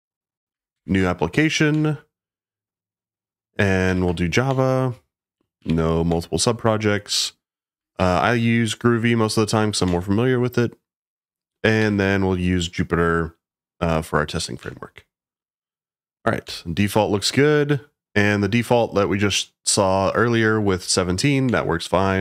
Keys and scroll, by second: 0.3-1.0 typing, 1.7 Return, 3.8 3, 4.4 Return, 5.3-6.1 typing, 7.9 2, 9.8 Return, 11.8 4, 14.6 Return, 16.4 Return, 21.4 Return.